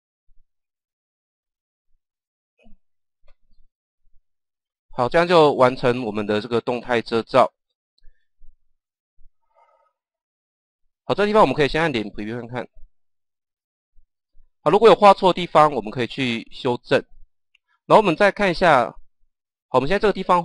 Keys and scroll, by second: 11.9 KP_0.